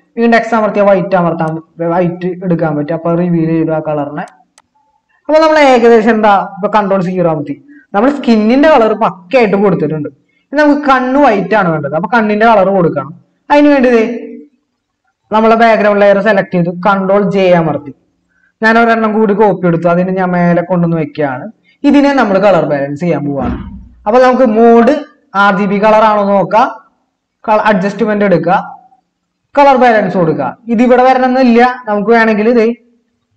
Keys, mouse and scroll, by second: 6.9 ctrl+0, 17.4 ctrl+j.